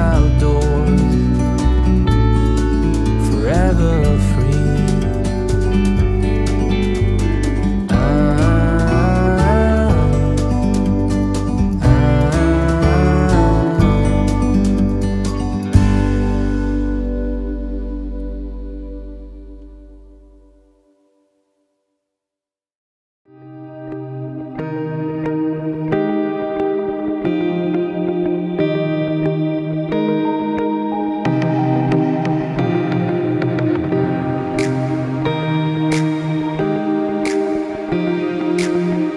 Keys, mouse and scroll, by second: 2.2 right click, 2.9 click, 6.6 click, 10.1 right click, 10.6 click, 15.3 Down, 16.8 Right, 17.6 Down, 17.9 Right, 18.6 Down, 19.0 click, 20.1 click, 21.6 click, 25.2 click, 27.0 click, 27.7 alt+scroll up 1, 28.4 click, 29.8 Left, 30.4 click, 32.4 click, 37.4 click, 38.0 Right, 39.0 click.